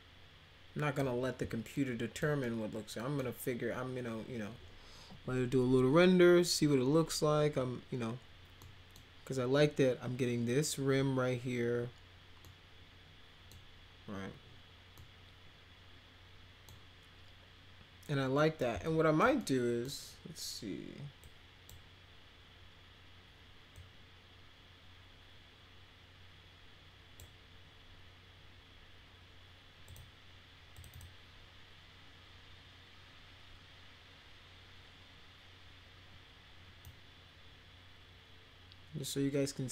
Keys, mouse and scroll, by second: 1.7 alt+middle click, 2.4 middle click, 8.6 middle click, 12.4-13.5 middle drag, 14.9-16.6 middle drag, 18.4 middle click, 18.8 alt+middle click, 19.4 middle click, 21.2 click, 23.7-27.1 drag, 29.8 click, 30.7 click, 30.9 click, 36.8-39.7 drag.